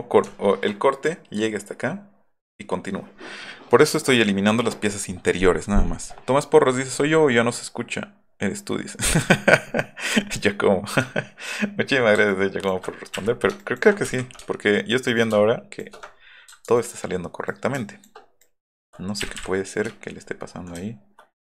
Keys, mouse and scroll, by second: 11.1 alt+scroll up 2, 12.3 ctrl+click, 13.1 Delete, 13.6 ctrl+click, 14.0 Delete, 15.1 ctrl+shift+click, 16.8 ctrl+click, 17.5 ctrl+shift+click, 18.4 ctrl+click, 19.2 Delete, 19.3 Delete, 19.9-20.6 alt+middle drag.